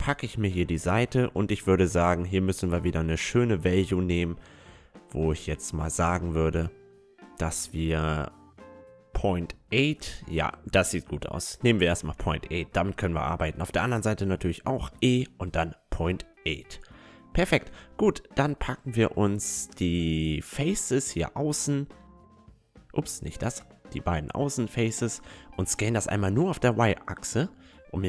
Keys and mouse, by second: 2.4 e, 7.1 ctrl+z, 7.9 e, 11.6 middle click, 12.4-14.1 drag, 13.1 e, 14.1 right click, 15.6 Tab, 15.9-17.2 middle drag, 16.8 Tab, 18.1-20.0 drag, 20.0 middle click, 20.2-23.8 drag, 21.4-28.0 right drag, 21.7-23.8 middle drag, 24.1-25.2 middle drag, 24.8 s.